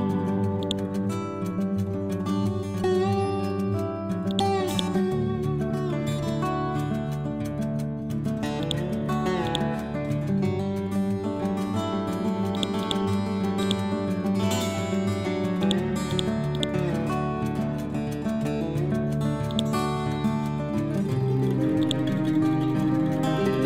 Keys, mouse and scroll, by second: 1.0-1.8 typing, 2.4 Return, 4.2 click, 5.8 scroll down 1, 6.4 ctrl+z, 6.9 scroll up 1, 8.5 click, 8.7 ctrl+a, 9.3 click, 9.6-11.1 typing, 12.4-16.0 drag, 16.0 right click, 16.4-19.4 drag, 21.7 click, 22.5-23.6 typing.